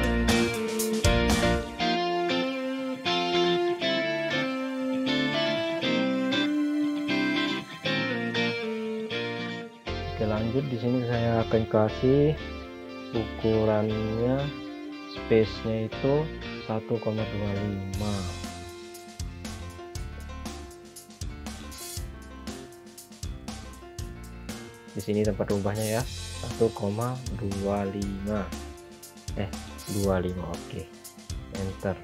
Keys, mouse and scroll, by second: 1.7-2.1 scroll down 1, 2.9 scroll up 1, 3.3-3.7 scroll down 1, 3.7 scroll up 1, 4.5 click, 8.5 scroll down 1, 11.4 click, 19.1 scroll down 1, 22.8 click, 26.1-26.6 typing, 28.0-28.7 typing, 30.8 5, 31.8 Return.